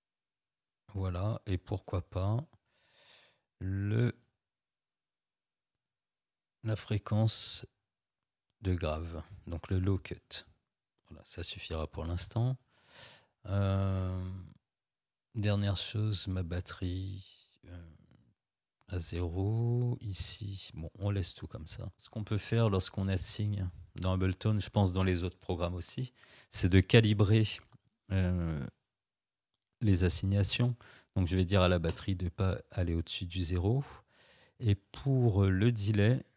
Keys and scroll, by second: 30.5 0, 31.9 Return.